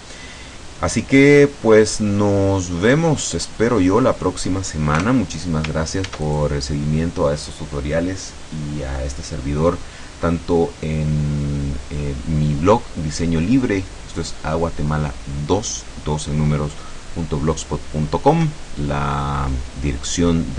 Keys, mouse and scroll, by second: 2.9-4.2 middle drag, 5.0 KP_0, 6.2 ctrl+s, 6.4 ctrl+click.